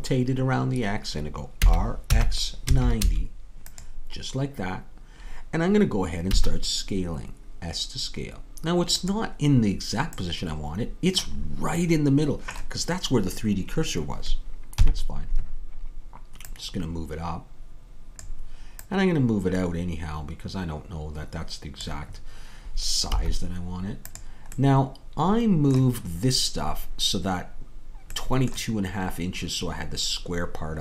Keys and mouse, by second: 1.7 r, 6.3 s, 14.8 KP_3, 16.4-18.4 drag, 18.9-21.9 drag, 23.1 s, 24.6 middle click, 29.0-30.8 middle drag.